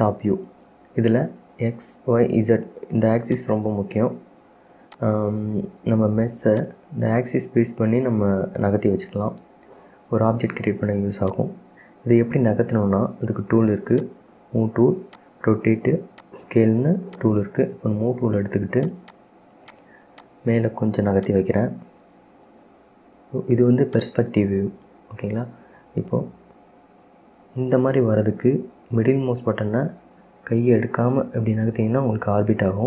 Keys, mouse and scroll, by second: 3.4 click, 5.0 click, 6.7 click, 9.3 KP_1, 11.4 click, 14.1-19.0 drag, 19.2 click, 19.8 drag, 20.3 click, 21.3 click, 24.0 click, 24.5-24.9 scroll up 2, 24.9-27.6 middle drag, 27.6-28.5 scroll down 1, 28.5 scroll down 1, 29.2-32.2 middle drag.